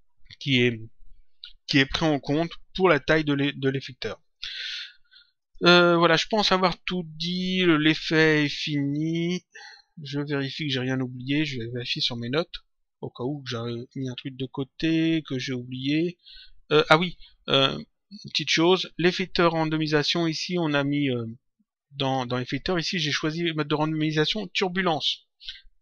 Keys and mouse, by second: 5.3 click, 7.2 click, 11.2 click, 13.2 click, 19.7 click, 22.0 click.